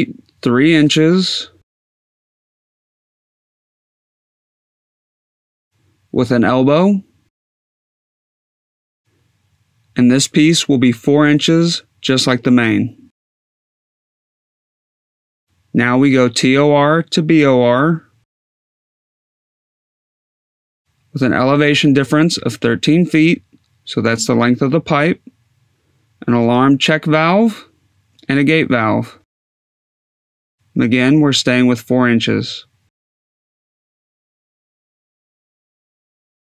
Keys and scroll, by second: 2.3 2, 3.2 ., 3.8 2, 4.2 5, 6.4 Tab, 7.2 e, 8.5 Tab, 11.0 4, 12.9 Tab, 15.4-16.8 typing, 17.6 Tab, 18.3-19.5 typing, 20.0 Tab, 21.5 1, 22.0 3, 23.4 Tab, 27.3 g, 28.1 a, 29.8 Tab, 32.2 4.